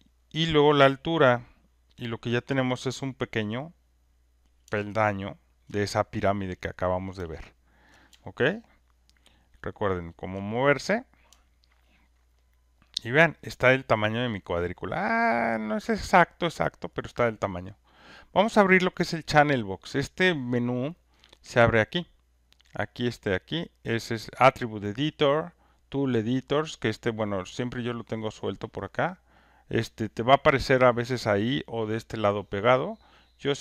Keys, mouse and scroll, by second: 3.3 click, 5.6 alt+middle click, 7.9 ctrl+middle click, 10.0 alt+scroll, 14.7 alt+click, 17.1 alt+click, 18.9 click, 21.2 click, 22.6 click, 23.5 click, 24.2 click, 25.7 click, 28.8 click, 29.7-32.5 drag, 33.5 click.